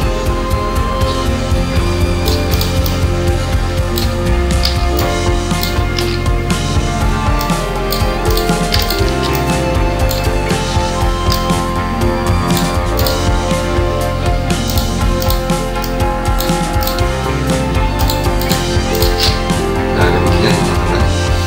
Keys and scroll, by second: 6.0 ctrl+g, 10.6 ctrl+g.